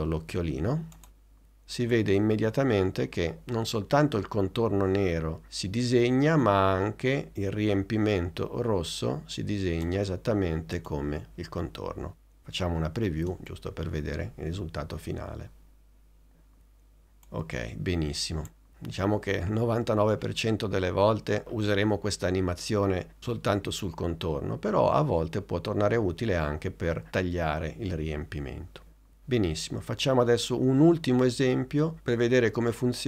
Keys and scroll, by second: 13.3 space.